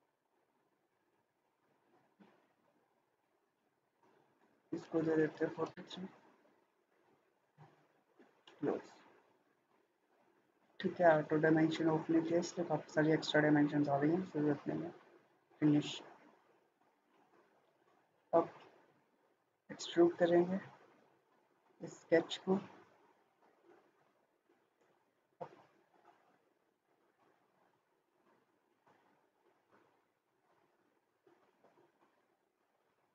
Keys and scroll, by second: 5.0 typing, 5.6 Return.